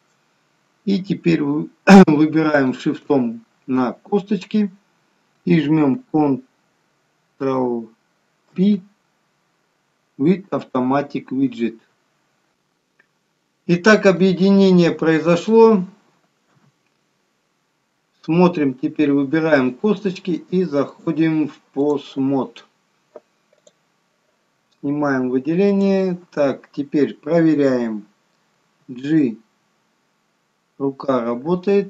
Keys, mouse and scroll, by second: 0.8-1.8 scroll down 1, 2.7 shift+click.